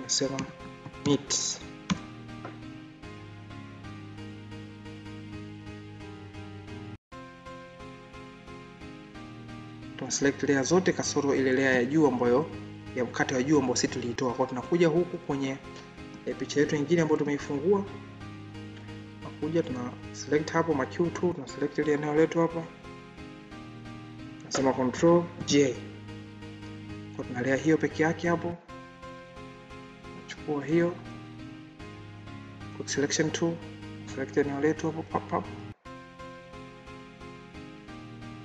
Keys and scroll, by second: 25.2 ctrl+j.